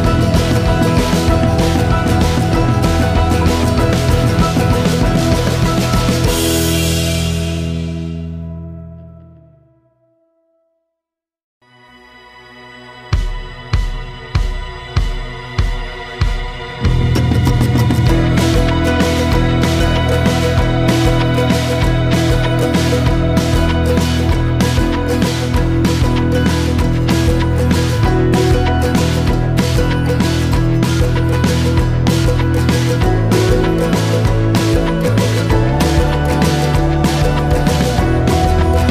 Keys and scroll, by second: 14.9 n, 16.2 ctrl+s.